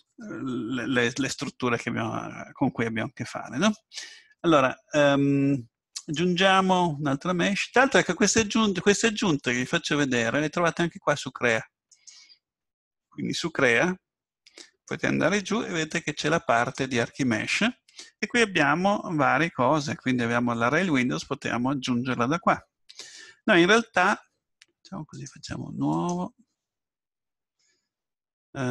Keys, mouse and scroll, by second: 2.4 middle click, 6.0 click, 6.9 click, 11.9-13.7 drag, 14.9-16.8 drag, 25.1-28.3 drag.